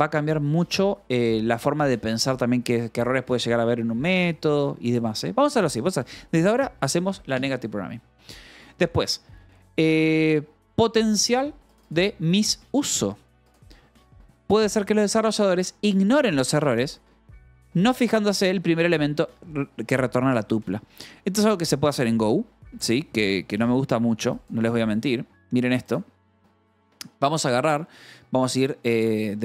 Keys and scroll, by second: 28.9-29.4 typing.